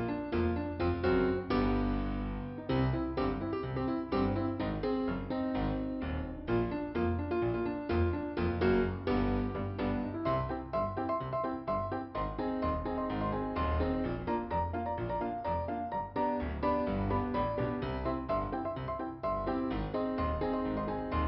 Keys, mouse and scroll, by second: 1.6 click, 2.3 click, 3.2 click, 4.5 click, 6.4 right click, 9.6 click, 10.5 scroll down 2, 11.8 click, 13.4 t, 14.6 scroll up 2, 15.7 middle click, 16.0-16.7 scroll up 2, 17.3 click.